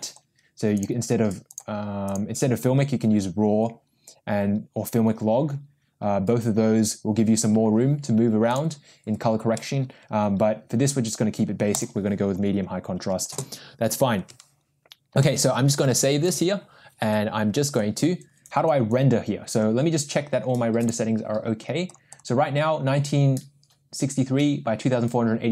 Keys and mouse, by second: 0.7 click, 2.1-6.8 drag, 8.5-12.0 drag, 16.3 ctrl+s, 20.8 click.